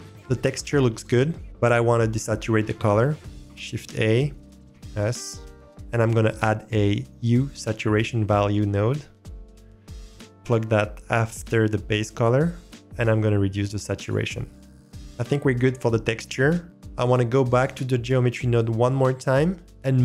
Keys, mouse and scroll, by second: 3.3 shift+a, 11.0 middle click, 14.0 click, 14.5 click, 14.7 click.